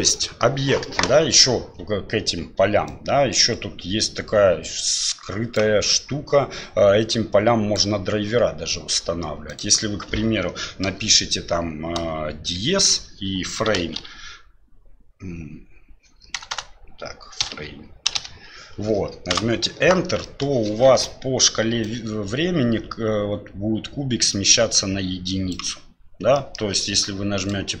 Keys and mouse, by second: 0.1 middle drag, 2.9-5.6 drag, 5.9-7.8 drag, 9.5-19.7 drag, 16.5 BackSpace, 20.2 middle click, 21.8-25.5 drag, 26.3 middle drag, 27.4 click.